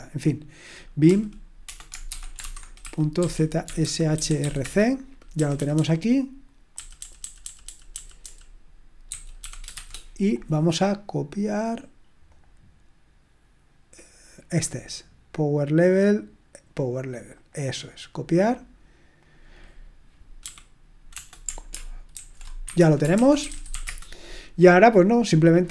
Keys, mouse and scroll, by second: 2.1-10.2 typing, 12.3 click, 15.7-17.8 drag, 17.3 right click, 18.4-20.0 drag, 20.4 i, 22.1 ctrl+alt+v, 22.6 Escape, 22.9-24.2 typing.